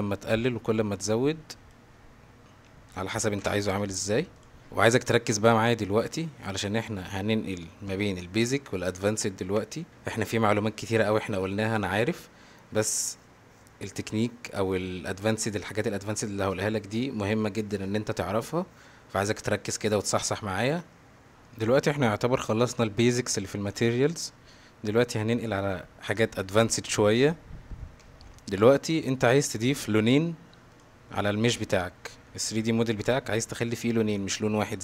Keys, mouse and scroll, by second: 3.0 click, 4.4 drag, 7.6 click, 10.9 click, 14.4 click, 21.5 middle click, 24.3 middle click, 30.7 click, 32.3-33.1 middle drag, 33.4-33.7 middle drag, 34.1 middle drag.